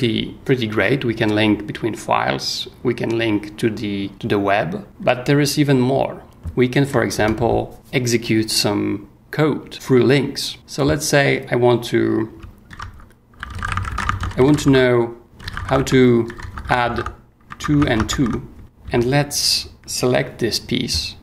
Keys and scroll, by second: 6.8 o, 7.1 Return, 12.7-19.7 typing.